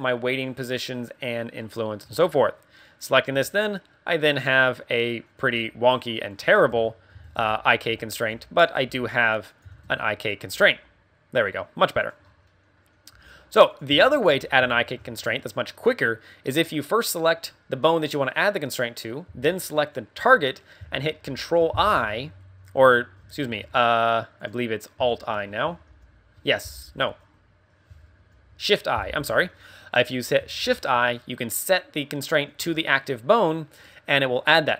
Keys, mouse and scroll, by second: 2.0 scroll up 2, 3.0 right click, 3.0 scroll up 1, 3.3 g, 4.4 right click, 4.7 middle click, 5.4 g, 6.4 right click, 6.7 Tab, 7.1-10.5 typing, 9.5 click, 9.9 Tab, 10.3 right click, 12.1 right click, 12.2 scroll down 2, 12.4 middle click, 13.1 g, 13.8 right click, 14.0 shift+middle click, 14.4-14.9 scroll up 3, 14.7 shift+middle click, 17.2 right click, 19.7 shift+right click, 21.2 ctrl+i, 22.6 scroll down 1, 22.8 scroll up 2, 23.4 ctrl+z, 23.7 right click, 24.3 right click, 25.1 shift+right click, 25.8 alt+i, 28.1 shift+i, 30.5 shift+i, 33.4 scroll down 3, 33.9 middle click, 34.4 scroll up 2.